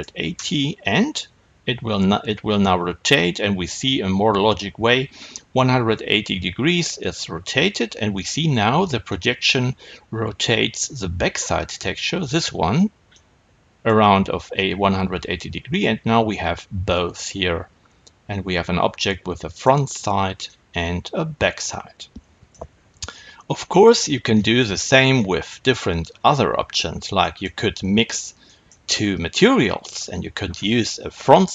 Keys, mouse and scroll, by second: 0.3 KP_Enter, 9.1-31.5 middle drag, 24.6-27.3 scroll down 2, 27.3-31.5 scroll down 1.